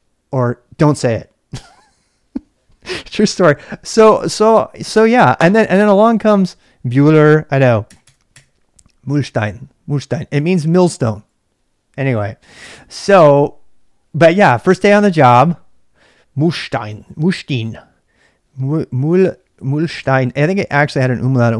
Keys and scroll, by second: 7.8 BackSpace, 8.0 BackSpace, 8.3 BackSpace.